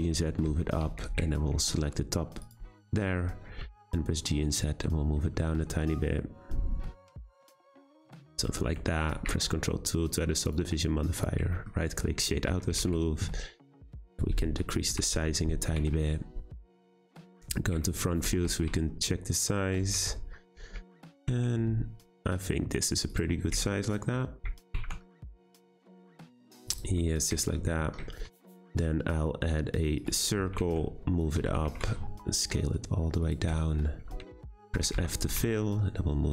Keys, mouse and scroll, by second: 0.5 Tab, 0.8 1, 1.3-2.4 shift+middle drag, 2.4 click, 2.9 middle click, 3.6 g, 8.2 Tab, 8.5-9.1 middle drag, 9.1 ctrl+2, 9.6-10.4 middle drag, 10.4 scroll down 1, 10.5-11.5 right drag, 11.5-12.5 shift+middle drag, 12.5 Tab, 12.7 a, 12.8 s, 14.9 o, 15.1 Tab, 15.7 g, 17.8 shift+middle click, 18.3 Tab, 18.4 a, 18.5 s, 19.9 Tab, 20.1 scroll up 2, 20.5 g, 23.1 click, 24.7 g, 24.7 z, 25.7 click, 26.0 g, 26.7 click, 27.0-28.2 middle drag, 28.2 shift+a, 30.6 g, 31.4 Tab, 31.6 a, 31.7 s, 33.6 shift+middle click, 33.9-34.3 scroll up 4, 34.3 shift+middle click, 34.7 f, 34.9 Tab, 35.3 g.